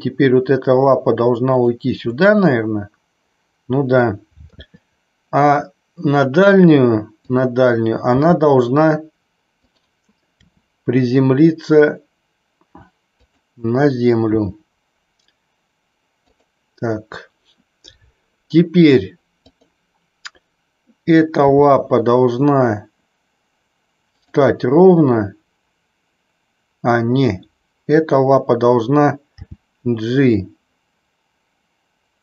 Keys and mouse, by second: 1.6 click, 2.0-3.9 middle drag, 4.4 KP_3, 7.2 click, 8.0 g, 9.7 click, 10.3 r, 13.2 click, 14.3 g, 16.3 click, 19.6 click, 21.4 g, 24.2 click, 29.3 g.